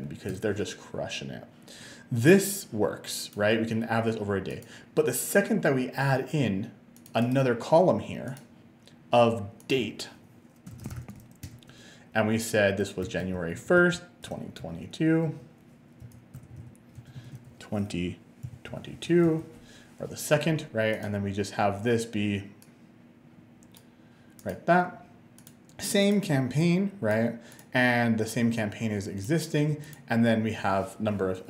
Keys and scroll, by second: 0.3 Return, 10.6-11.6 typing, 12.9-17.2 typing, 18.2-19.2 typing, 19.3 Return.